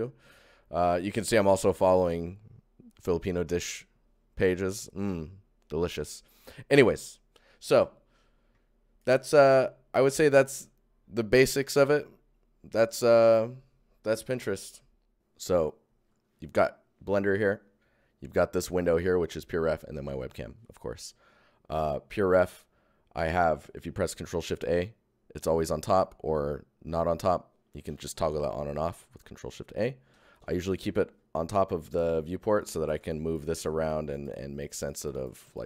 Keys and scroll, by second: 14.9 Tab, 23.5 ctrl+shift+Tab, 24.2 ctrl+shift+a, 32.4 alt+shift+a, 32.5 alt+Tab, 32.5 alt+Tab, 33.3 alt+shift+Tab, 33.5 alt+shift+Tab, 34.1 alt+Tab, 35.0 ctrl+alt+shift+Tab, 35.6 alt+shift+Tab.